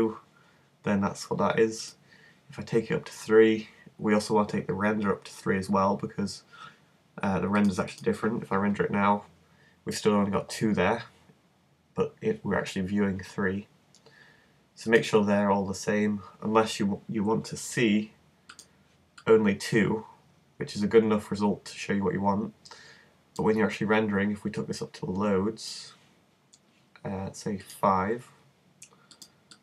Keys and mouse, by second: 1.8-3.8 drag, 7.6 click, 10.5 Escape, 15.0-16.7 drag, 16.7-18.6 middle drag, 18.6-20.2 drag, 21.0-24.6 middle drag, 27.6-29.6 drag.